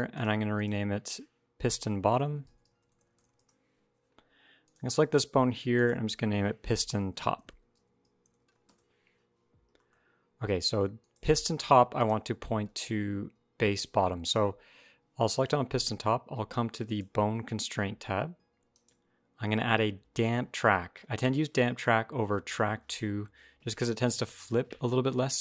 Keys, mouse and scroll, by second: 0.4 click, 2.9 t, 4.4 click, 5.5 click, 9.6 middle click, 10.8 click, 11.8 click, 14.0 click, 16.6 click, 18.5 click.